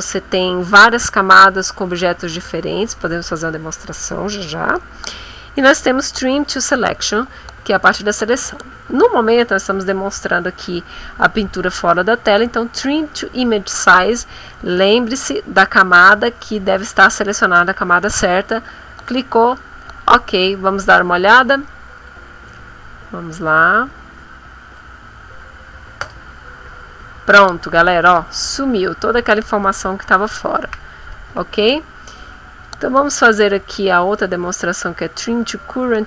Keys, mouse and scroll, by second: 19.0 click, 21.9 click, 23.4-24.9 drag, 26.0 Return, 31.1 ctrl+z, 34.0 click, 35.8 click.